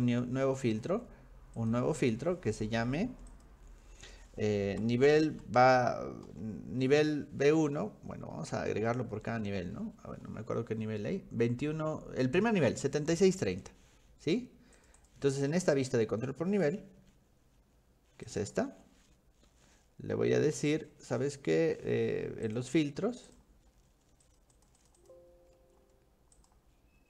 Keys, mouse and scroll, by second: 0.4-1.0 scroll up 4, 1.6 click, 3.3 click, 5.1 b, 5.4 1, 6.3 -, 10.1-11.2 middle drag, 14.2 middle click, 14.8 click, 15.0 click, 18.3 click, 18.6 v, 18.7 v, 20.7 click, 22.5 click, 23.3 click, 24.2 click, 24.5 click, 24.8 click, 25.0 click, 26.4 click.